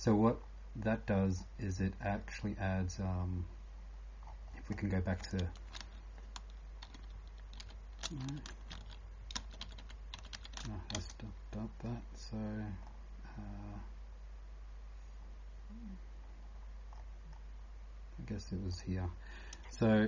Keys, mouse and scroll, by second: 0.0-20.0 typing, 0.4 scroll up 2, 1.7 scroll up 8, 2.0 scroll down 1, 3.1 scroll down 1, 4.2 scroll down 14, 5.2 click, 5.2 scroll up 8, 6.8 ctrl+shift+y, 8.2 ctrl+z, 9.4 ctrl+shift+z, 9.6 ctrl+shift+z, 10.3 ctrl+shift+z, 11.7 scroll down 1, 12.9 scroll down 5, 13.7 scroll down 1, 16.9 scroll down 6, 18.7 click, 18.7 scroll up 5.